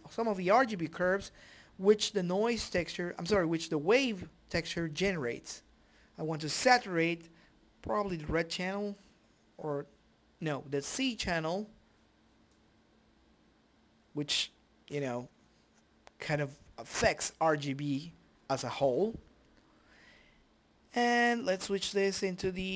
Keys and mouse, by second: 2.7 middle click, 4.5 click, 5.1 click.